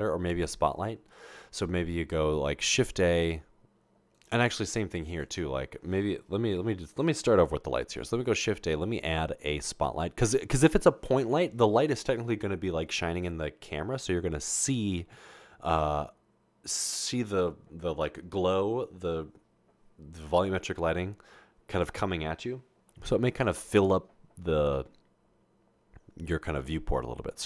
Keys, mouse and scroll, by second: 0.0 Delete, 1.5 a, 6.6 Delete, 9.7 a.